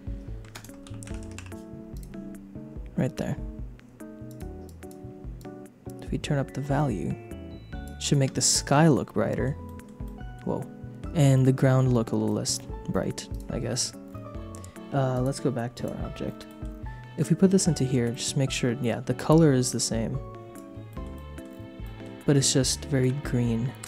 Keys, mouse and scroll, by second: 4.3 click, 4.6 click, 5.4-7.9 shift+drag, 8.4 middle click, 10.2 middle click, 11.3 shift+click, 12.3 click, 12.7 scroll up 1, 13.3 click, 15.1 click, 16.4 middle click, 17.1 click, 18.1 middle click, 19.7 click, 20.8 shift+middle click, 21.2 middle click, 21.8 shift+middle click, 23.0 KP_0, 23.7 click.